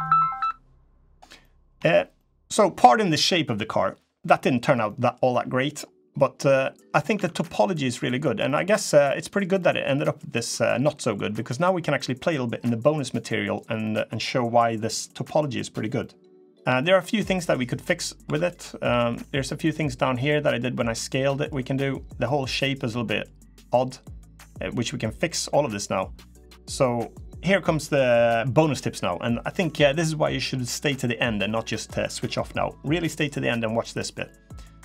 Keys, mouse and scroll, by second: 0.8 scroll down 4, 1.1 middle click, 1.5 Tab, 1.9 middle click, 2.6 middle click, 4.8 middle click, 5.0 middle click, 5.6-6.3 scroll up 3, 6.3 middle click, 6.7 scroll up 2, 6.9 Tab, 7.4 middle click, 7.9 scroll down 2, 8.2 middle click, 8.8 middle click, 9.3 middle click, 10.1-10.5 scroll up 3, 10.5 middle click, 11.0-12.4 scroll down 2, 12.9 middle click, 13.6 middle click, 14.5 scroll down 1, 14.8 middle click, 15.7 middle click, 16.4 middle click, 16.4 scroll up 2, 16.5 shift+middle click, 16.7 shift+middle click, 16.9 middle click, 18.0 3, 18.2 click, 18.6 Tab, 18.8 click, 19.2 middle click, 20.5 middle click, 21.5 middle click, 22.3 scroll down 2, 22.6 middle click, 23.2 middle click, 24.6-25.0 scroll up 1, 25.0 middle click, 25.7 middle click, 26.2 scroll down 1, 26.6 middle click, 27.3 middle click, 29.0 middle click, 33.4 scroll down 1, 33.5 scroll up 2, 34.0 middle click.